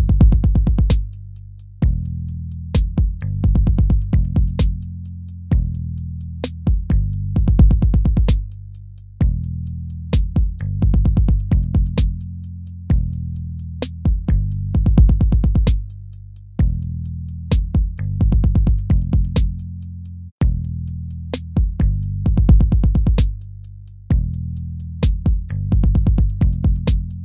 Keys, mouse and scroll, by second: 1.7 ctrl+-, 3.2 ctrl++, 3.4 ctrl++, 5.2 ctrl+-, 5.6 ctrl++, 5.8 ctrl++, 10.4 ctrl+-, 11.0 ctrl+-, 11.4 ctrl++, 11.9 ctrl+-, 12.6 ctrl++, 14.7 ctrl+-, 15.0 ctrl++, 15.2 ctrl++, 17.5 ctrl+-, 18.4 ctrl++, 19.9 ctrl++, 26.2 ctrl+-, 26.7 ctrl++.